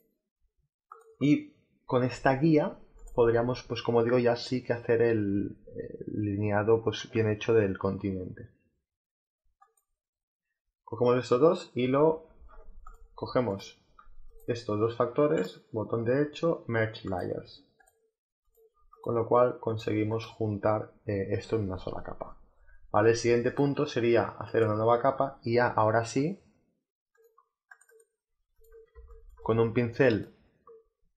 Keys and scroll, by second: 12.2 ctrl+alt+z, 28.8 space.